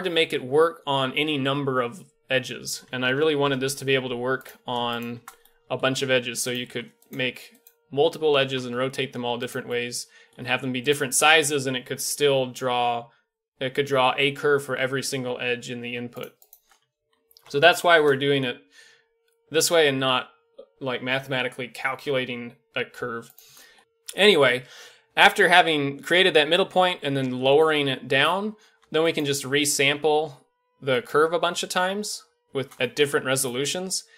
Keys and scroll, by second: 3.0 ctrl+l, 3.3 typing, 5.9 shift+d, 6.6 shift+d, 7.2 shift+d, 8.4 r, 10.3 s, 17.1 ctrl+l, 17.5 x.